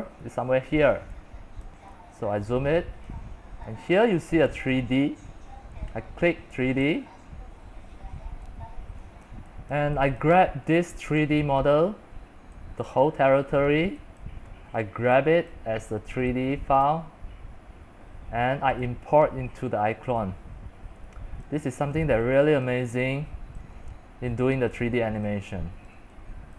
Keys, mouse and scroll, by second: 1.9 click, 2.1 click, 2.2 scroll up 6, 2.4 scroll, 3.3-8.2 drag, 8.2 middle click, 8.2 scroll, 9.0-10.2 typing, 9.5 click, 9.8 click, 10.5-12.0 drag, 12.0-13.2 middle drag, 13.2-14.7 drag, 14.7-15.1 scroll up 16, 15.1 middle click, 15.1 scroll, 15.3-15.6 scroll up 1, 15.6 click, 16.0-17.1 middle drag, 17.1-20.3 drag, 20.0-26.5 typing, 21.5 click, 22.1 click, 23.0 click, 23.7 click, 24.0 scroll up 3, 25.4 click, 26.0 click.